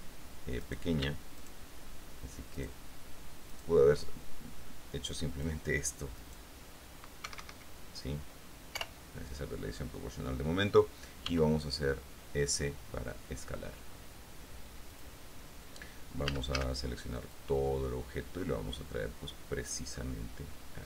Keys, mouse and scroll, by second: 0.8 right click, 1.1 middle click, 1.6 shift+right click, 2.8 shift+right click, 3.0 shift+middle click, 3.7 shift+right click, 5.5 click, 6.4 right click, 7.4 Escape, 9.0 o, 11.4 s, 15.1 click, 16.4 a, 17.5-20.8 drag.